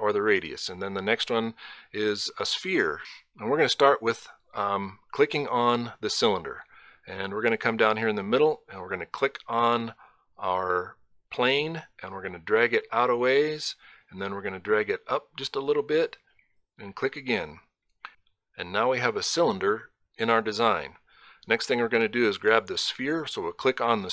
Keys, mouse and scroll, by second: 3.6 click, 7.9 click, 13.2 click, 16.6 click, 22.8 click.